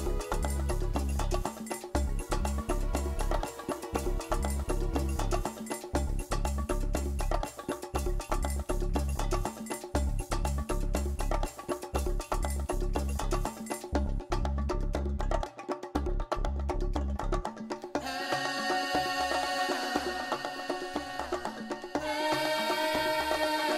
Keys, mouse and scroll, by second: 0.1 middle click, 2.5 Tab, 3.9 click, 4.5 middle click, 5.0 Tab, 5.4 middle click, 7.6 click, 8.3 click, 8.7 g, 9.6 right click, 10.0 click, 10.0 g, 10.6 right click, 10.7 middle click, 11.9-12.7 ctrl+z, 13.2 ctrl+z, 14.4 ctrl+shift+z, 14.7 middle click, 15.0 Tab, 15.3 middle click, 15.7 ctrl+z, 16.0 ctrl+z, 17.0 middle click, 17.5 Tab, 17.9 shift+middle click, 18.2 middle click, 19.7 scroll up 2, 20.2 click, 21.2 click, 21.7 click, 21.9 click, 22.4 g, 23.3 right click, 23.5 middle click.